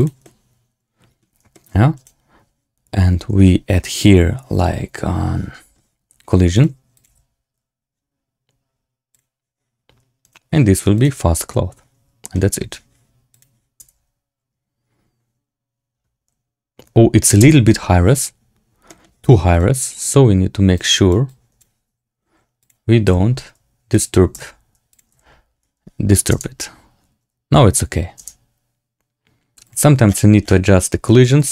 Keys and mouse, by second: 0.1-1.1 drag, 0.1-1.1 right drag, 1.4 shift+click, 1.4 shift+right click, 6.4-9.1 drag, 10.1 click, 11.9-12.5 drag, 13.2 click, 13.7 space, 18.2 space, 18.8 middle click, 19.6 click, 20.7 click, 21.2 click, 23.0 x, 23.8 click, 24.3 x, 24.8 click, 25.0 x, 26.2 space, 29.6 click, 29.6 space, 31.3 click.